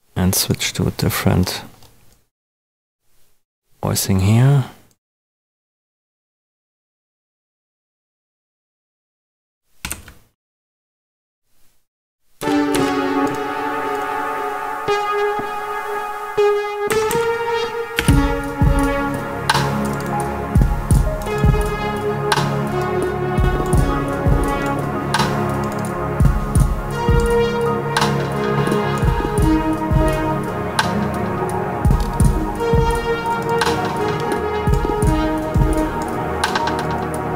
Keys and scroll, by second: 9.8 super+d, 12.3 Down, 16.8 Up, 17.9 space.